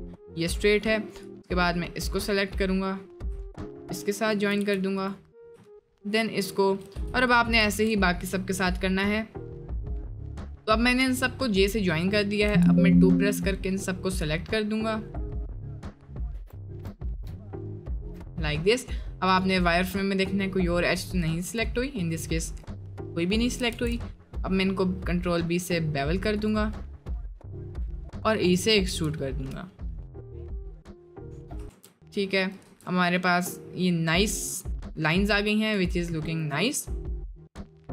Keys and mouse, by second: 1.2 click, 2.3 click, 4.2 shift+click, 4.6 j, 5.0 click, 6.9 j, 12.9 click, 14.4 click, 15.4 middle click, 15.8 click, 16.3 2, 16.9-18.0 shift+drag, 18.3 middle click, 19.3 click, 19.6-20.7 middle drag, 21.6 click, 22.1 middle click, 22.5 middle click, 23.2 middle click, 23.7 ctrl+b, 26.7-27.0 middle drag, 27.6 middle click, 28.9 e, 31.2 middle click, 31.7 ctrl+r, 32.7 Tab, 32.9 middle click, 33.3-33.6 middle drag, 34.3-34.7 middle drag, 35.4 middle drag, 36.0-36.5 middle drag, 36.6-37.0 middle drag, 37.4 middle click, 37.8 middle click.